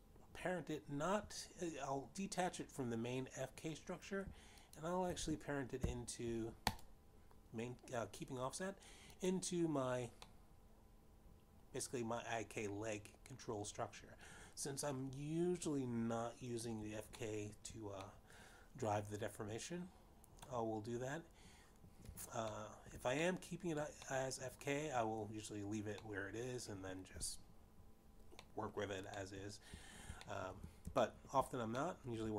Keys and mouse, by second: 7.0 shift+click, 7.9 ctrl+p, 8.5 click, 11.5 click, 12.5 middle click, 19.4 shift+middle click, 20.4 middle click, 24.9 shift+middle click, 25.5 middle click, 26.3 middle click, 28.3 middle click, 30.8 middle click, 31.5 shift+middle click.